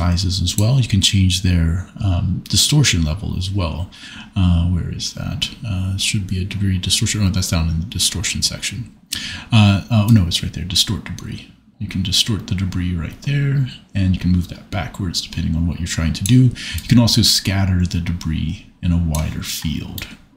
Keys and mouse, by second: 0.3 click, 10.1-11.8 drag, 16.2 middle click, 17.0 middle click.